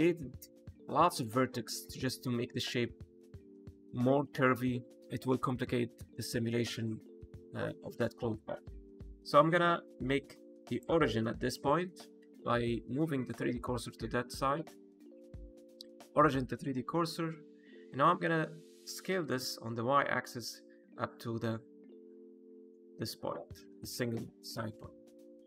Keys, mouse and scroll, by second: 5.5 middle click, 6.4 shift+middle click, 6.8-7.1 scroll up 2, 9.8 shift+right click, 13.2 click, 16.8 middle click, 17.5 scroll down 1, 17.7 middle click, 18.8 s, 19.1 y.